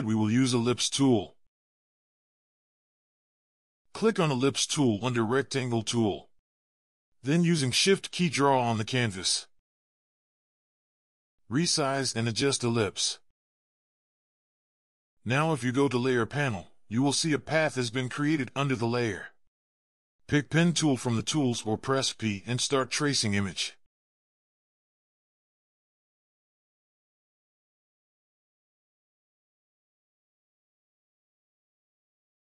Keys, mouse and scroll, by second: 6.2 shift+click, 9.3 shift+click, 12.0 shift+click, 25.6 alt+scroll up 1, 26.0-26.5 scroll down 2, 26.9 ctrl+scroll up 1, 27.9 ctrl+scroll up 2, 29.8 ctrl+scroll down 1, 30.1 ctrl+scroll up 1, 30.6 alt+scroll down 2.